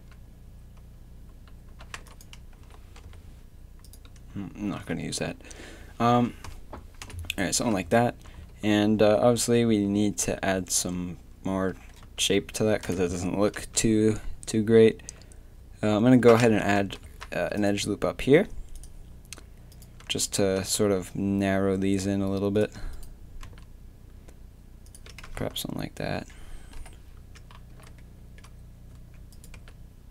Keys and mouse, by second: 0.0 g, 0.0 a, 1.3 a, 1.7 a, 2.0 b, 2.5 s, 4.7 Tab, 4.7 a, 5.0 z, 7.0-9.6 typing, 7.6 Tab, 12.0 Tab, 12.6 Tab, 12.8 KP_7, 13.0 Tab, 13.6 Tab, 13.9 z, 14.5 a, 14.9 a, 16.8 ctrl+r, 20.8 g, 23.4 g, 25.2 Tab, 25.4 z, 26.8 KP_3, 27.2 Tab, 27.7 z, 28.9 a, 29.6 g.